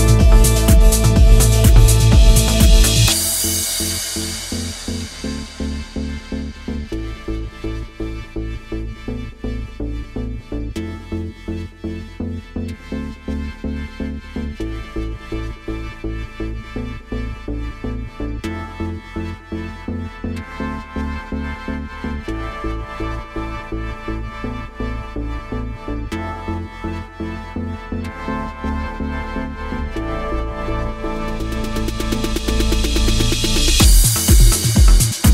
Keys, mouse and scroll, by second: 0.4 click, 1.2 e, 2.2 r, 3.8 click, 4.0 r, 5.0 click, 5.4 r, 6.4 click, 6.5 r, 12.4 click, 13.0 e, 14.3 r, 16.1 click, 16.7 click, 17.2 g, 18.0 click, 18.2 g, 19.5 click, 19.7 g, 20.6 click, 20.8 g, 21.5 click, 21.7 g, 25.3 click, 25.5 g, 26.6 click, 26.7 g, 28.2 click, 29.7 g, 30.3 click, 31.8 g, 34.5 click, 35.1 2.